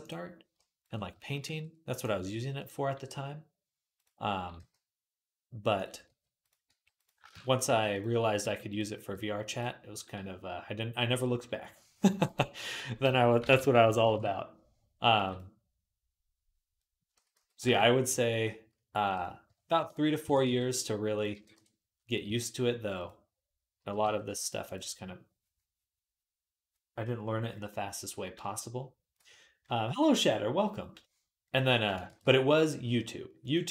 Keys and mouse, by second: 0.6 click, 0.7-3.9 shift+middle drag, 1.3 e, 2.0 r, 3.9-5.6 drag, 4.4 g, 5.6-9.6 middle drag, 5.9-8.8 typing, 7.1 shift+Tab, 11.9 e, 12.9 ., 13.4 s, 13.9-31.7 middle drag, 15.0 g, 17.0 s, 19.3 ., 20.1 s, 21.2 g, 22.1 s, 23.6 g, 31.7 ctrl+click, 31.9 ctrl+r, 32.1-33.7 right drag.